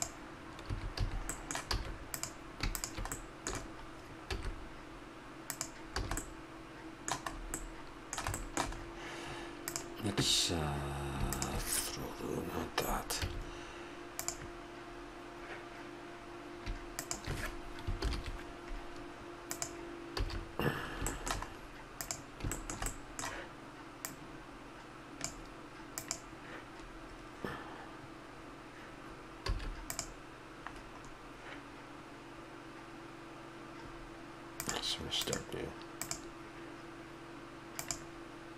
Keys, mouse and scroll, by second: 0.7 a, 0.9 a, 1.3-2.1 middle drag, 1.7 a, 2.1-3.1 right drag, 3.1 click, 4.3 s, 6.0 a, 9.7-11.3 right drag, 11.3 click, 13.2 a, 14.1-16.0 drag, 16.9 click, 18.0 ctrl+l, 20.2 a, 20.8 middle drag, 22.9-23.9 drag, 23.9 right click, 24.0-25.8 drag, 25.9-27.9 drag, 29.5 a, 29.9-30.6 right drag, 30.6 click, 34.5-37.0 drag, 37.7-38.5 drag.